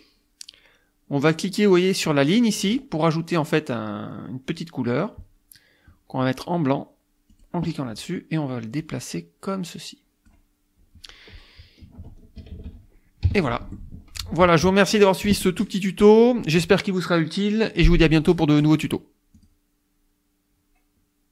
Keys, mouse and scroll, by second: 2.6 click, 7.3 click, 8.8-10.5 drag, 11.8 KP_Add, 12.4 KP_Subtract, 13.2 KP_5, 13.7 F1, 14.9 click, 19.4 click.